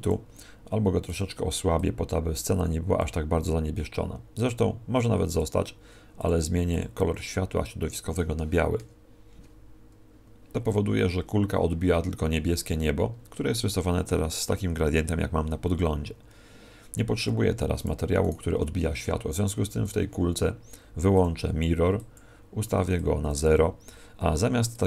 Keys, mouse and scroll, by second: 17.2 Escape, 17.7 right click, 19.8 click.